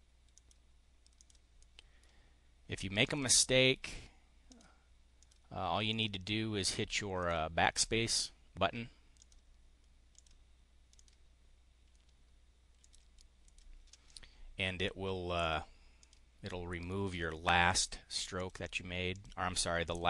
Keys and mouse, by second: 0.3 click, 1.1 click, 1.5 click, 2.9 click, 4.4 click, 5.0 click, 5.8 click, 7.1 click, 7.5 drag, 9.1 click, 10.1 click, 10.9 click, 12.7 click, 13.3 click, 15.3 drag, 15.9 click, 16.4 click, 17.7 click, 18.3 click, 18.9 click, 19.7 click.